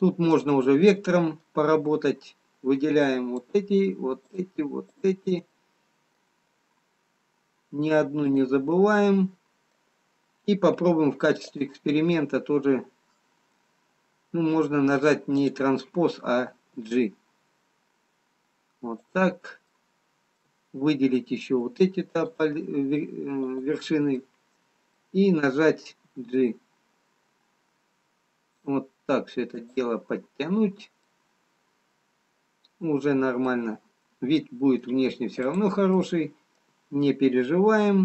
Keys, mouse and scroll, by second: 0.3 click, 4.8 shift+click, 5.5 shift+click, 5.5 middle click, 7.3-8.2 scroll up 3, 8.3 shift+click, 9.3 middle click, 12.1 click, 17.5 click, 17.5 g, 20.3 middle click, 22.2 shift+click, 23.4 shift+click, 24.2 middle click, 26.5 g, 31.3 middle click, 34.5 scroll down 2, 35.6 click, 36.6 middle click.